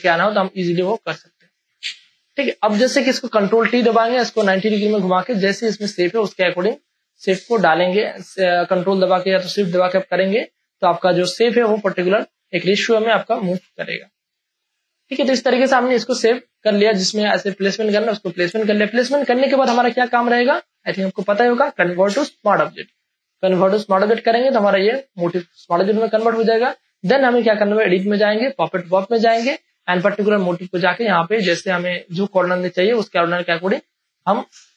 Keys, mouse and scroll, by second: 0.4 ctrl+space, 0.7 ctrl+click, 1.0 ctrl+space, 1.1 click, 2.3 ctrl+click, 3.4 ctrl+t, 4.7 shift+click, 6.8 click, 8.0 shift+click, 11.6 shift+space, 11.9-13.4 ctrl+drag, 13.4 ctrl+click, 13.7 click, 14.3 space, 14.7 ctrl+click, 14.8-16.1 ctrl+drag, 16.9 ctrl+click, 17.7 Return, 23.2 right click, 24.6 click, 26.3 ctrl+space, 26.6 ctrl+click, 26.8 ctrl+space, 27.8 click, 27.8 space, 32.1 click, 32.3 space, 32.5 click, 32.8 space, 33.1 ctrl+click.